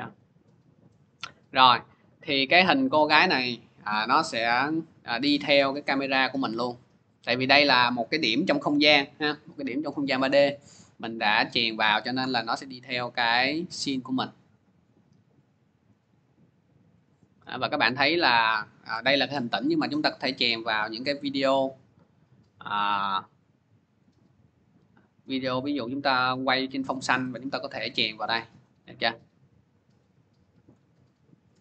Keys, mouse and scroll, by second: 1.4 click, 3.2 click, 3.7 middle click, 4.1 middle click, 17.6 click, 18.2-18.8 scroll, 19.2-20.2 scroll, 21.6 middle click, 23.6 middle click, 30.5 click, 30.9 middle click.